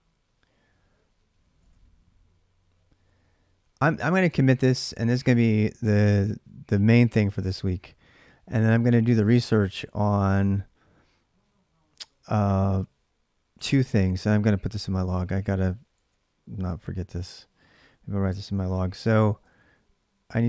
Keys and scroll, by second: 1.4 alt+Tab, 15.7 alt+Tab, 16.4 alt+Tab, 18.2 ctrl+a, 18.5 1, 19.2 ctrl+[, 19.5 j, 19.6 j.